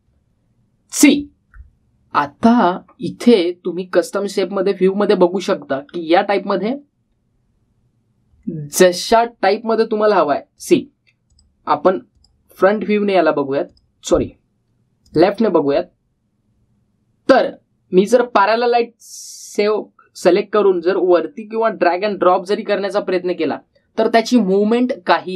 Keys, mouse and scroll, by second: 1.9 click, 6.1-7.2 scroll up 2, 7.2-9.1 scroll down 2, 11.4 click, 18.9 click, 21.9-23.1 drag.